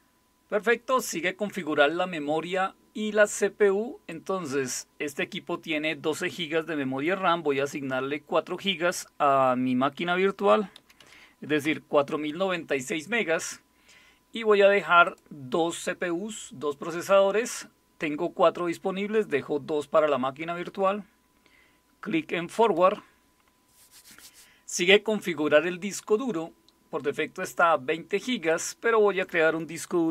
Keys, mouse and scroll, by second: 4.1 click, 10.3-11.6 typing, 15.0 click, 22.6 click, 28.5 click, 29.9-30.1 typing.